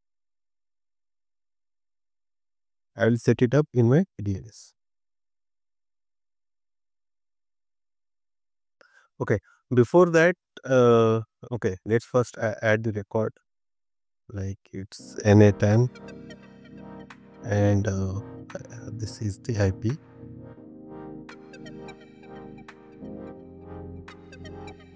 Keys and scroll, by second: 20.1 super+c, 21.8 super+v.